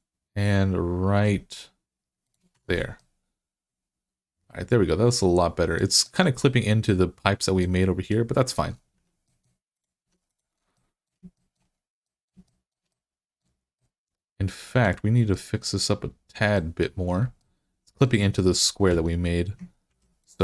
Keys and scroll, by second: 2.4 Tab, 6.2 Tab, 8.8 Tab, 9.9 Tab, 18.7 Tab, 19.7 ctrl+r.